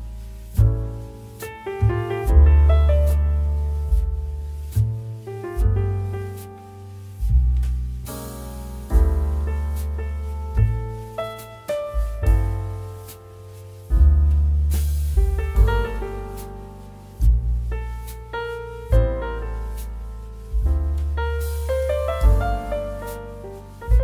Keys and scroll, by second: 15.3 Delete, 17.0 ctrl+d, 23.6 ctrl+t.